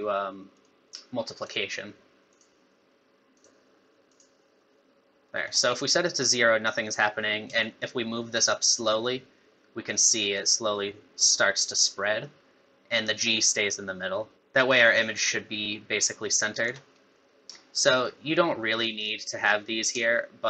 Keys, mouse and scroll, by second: 1.4 click, 3.3 click, 5.3 middle click, 7.6 shift+click, 17.1 middle click, 20.1 shift+click.